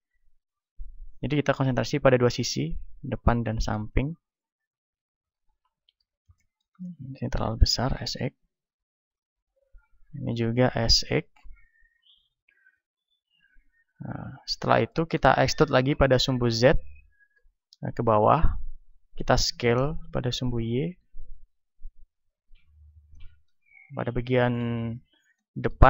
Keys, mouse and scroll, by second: 0.5-5.3 drag, 3.3 middle click, 5.3-7.1 right drag, 6.0 z, 6.3 click, 7.1-9.0 middle drag, 7.6 s, 9.0-10.9 drag, 9.9-11.5 right drag, 10.9 s, 11.9-14.3 drag, 13.1 a, 14.3-15.7 right drag, 15.7 middle click, 15.7 e, 19.0-20.9 drag, 19.6 s, 22.5-24.2 drag, 23.1-25.8 middle drag.